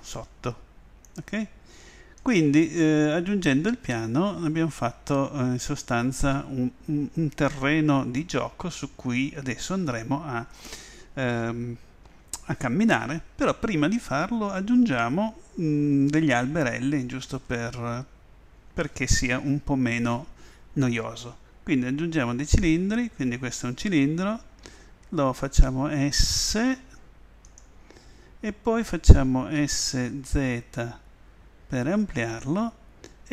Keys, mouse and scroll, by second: 0.1 s, 2.3 click, 17.3 shift+a, 24.7 s, 27.6 click, 29.6 s, 30.3 s, 32.5 click.